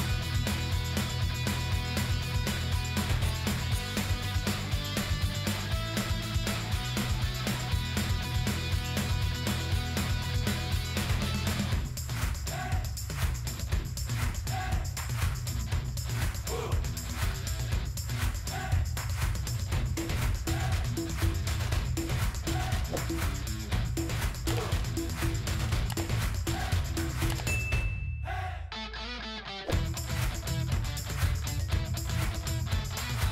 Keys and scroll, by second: 21.5 ctrl+g.